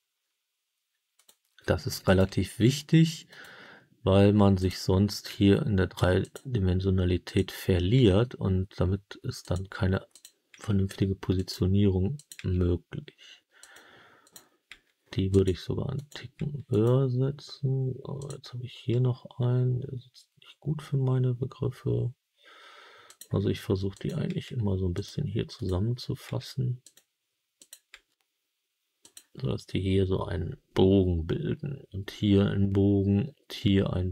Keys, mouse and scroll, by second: 1.1 click, 2.0 click, 2.3 g, 3.2 click, 4.5 click, 5.2 g, 6.1 click, 7.2 click, 7.9 g, 9.3 click, 10.0 click, 10.4 g, 11.3 click, 12.1 click, 12.4 g, 13.5 click, 14.1 click, 14.6 g, 15.2 click, 15.9 click, 16.3 g, 16.6 click, 18.1 click, 18.8 g, 23.0 click, 23.8 click, 24.9 click, 24.9 g, 25.5 click, 26.2 g, 26.7 click, 27.5 click, 27.8 g, 28.9 click.